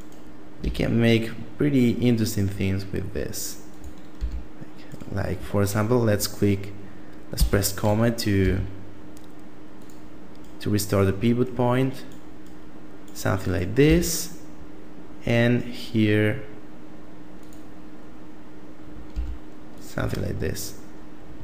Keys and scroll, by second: 0.4 e, 3.9 r, 7.1 ,, 8.2 r, 13.7 e, 18.9 r, 19.7 Tab, 21.2 a.